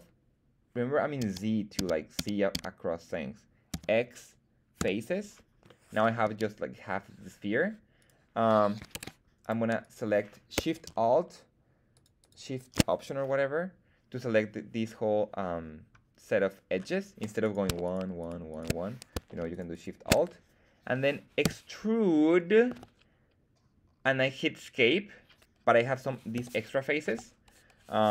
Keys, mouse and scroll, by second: 1.1 z, 1.7 z, 2.1 z, 2.5 z, 3.6 x, 5.6 middle click, 6.2 z, 7.9 right click, 8.9 ctrl+Tab, 9.7 click, 9.7 right click, 11.9 alt+shift+click, 11.9 alt+shift+right click, 12.1 alt+shift+click, 17.4 right click, 17.8 shift+right click, 18.1 shift+right click, 18.4 shift+right click, 19.4 alt+shift+right click, 19.6 alt+shift+right click, 21.3 e, 22.6 Escape, 26.3 g, 27.0 Escape.